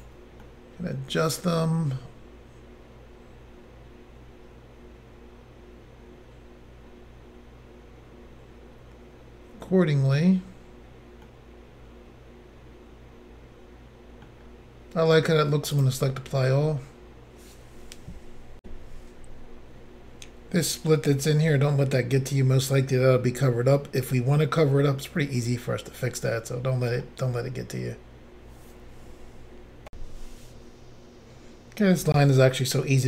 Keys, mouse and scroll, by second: 0.4 middle click, 11.2 middle click, 15.8 click, 18.6 Insert, 20.6-21.3 scroll down 1, 21.3 scroll up 1, 21.5 middle click, 29.9 Insert, 32.8 middle click.